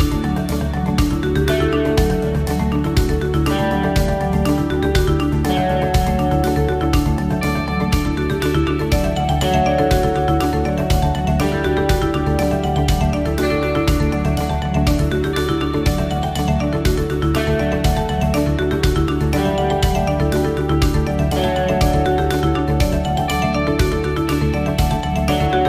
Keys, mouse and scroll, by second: 0.2 middle click, 1.9 click, 2.0 click, 3.8 click, 5.8 click, 10.2 click, 11.4 click, 15.5 click, 19.5 click, 22.1 click.